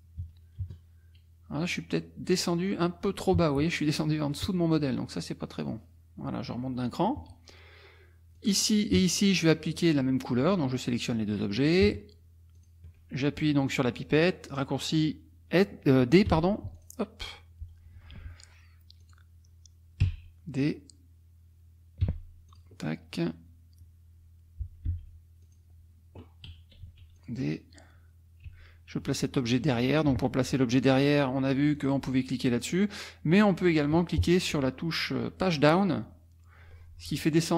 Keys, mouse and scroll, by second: 0.2 KP_Subtract, 0.6 KP_Add, 5.6 click, 8.4 click, 9.8 shift+click, 10.8 shift+click, 11.6 shift+click, 12.6 shift+click, 16.3 d, 16.8 click, 18.0 F1, 19.0 click, 20.1 f, 22.0 d, 22.5 click, 24.9 n, 25.4 click, 26.8 d, 27.2 click, 28.5 a, 31.8 click, 34.5 Page_Down, 36.0 Page_Down.